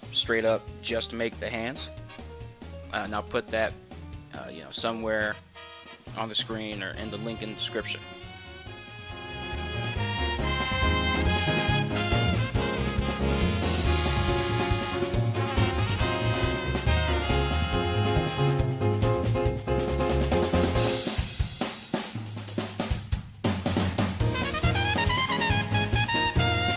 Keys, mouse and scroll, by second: 0.0 middle click, 0.1 middle click, 0.3 middle click, 0.4 KP_7, 0.8 2, 1.5 middle click, 1.5 z, 1.9 alt+shift+right click, 2.2 ctrl+q, 2.3 ctrl+z, 2.8 click, 3.3 middle click, 3.4 KP_Decimal, 3.6 middle click, 4.2 middle click, 4.9 middle click, 5.8 middle click, 5.8 2, 6.0 shift+click, 6.5 middle click, 6.9 g, 7.5 middle click, 8.7 KP_1, 8.9 l, 9.0 g, 10.9 middle click, 11.2 KP_1, 11.4 g, 13.4 middle click, 13.9 KP_1, 14.1 g, 14.5 middle click, 14.9 middle click, 14.9 g, 15.1 middle click, 15.1 g, 15.3 shift+right click, 15.5 right click, 15.5 middle click, 15.7 middle click, 16.2 middle click, 16.2 f, 16.6 middle click, 17.0 middle click, 17.0 g, 17.7 ctrl+r, 17.7 g, 18.0 middle click, 18.2 middle click, 18.4 middle click, 18.9 middle click, 19.1 shift+middle click, 19.3 click, 19.6 right click, 19.6 1, 19.7 ctrl+right click, 19.8 KP_7, 20.0 shift+middle click, 20.1 e, 20.9 middle click, 21.7-23.3 shift+right drag, 23.3 ctrl+r, 23.3 click, 23.8 right click, 23.8 2, 24.2 middle click, 25.3 middle click, 25.5 middle click, 25.8 shift+click, 26.1 ctrl+z, 26.2 middle click, 26.4 middle click, 26.6 shift+click.